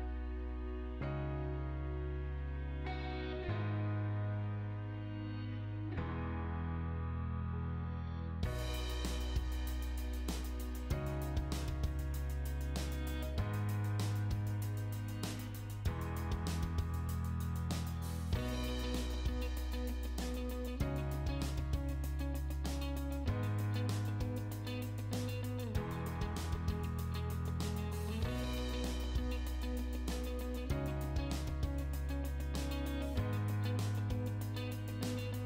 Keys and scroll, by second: 1.7 p, 2.1 space, 3.7 space, 5.5 space, 7.4 space, 24.0 space, 28.3 Escape, 33.9 l, 35.3 space.